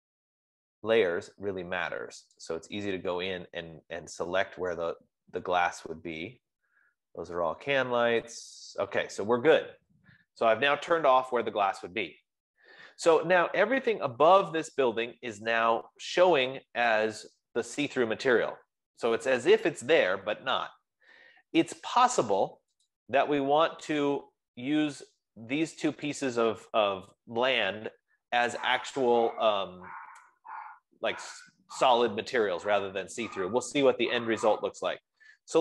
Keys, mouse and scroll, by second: 0.3-2.8 drag, 4.4 scroll, 5.4-7.0 scroll, 6.7 F15, 7.0-8.4 scroll down 25, 9.0-9.4 scroll, 9.4-9.8 scroll up 9, 10.1 scroll up 11, 10.3-11.9 scroll, 23.2 click, 25.8 click, 26.7 click, 35.3-35.6 scroll.